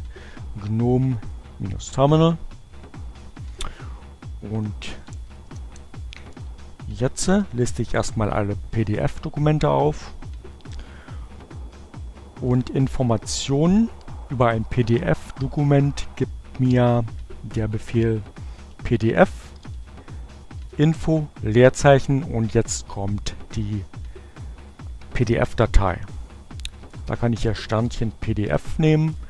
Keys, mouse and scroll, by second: 2.8-6.9 typing, 10.8 p, 15.6-16.5 typing, 18.1-19.6 typing, 26.0-27.6 typing, 28.6 Return.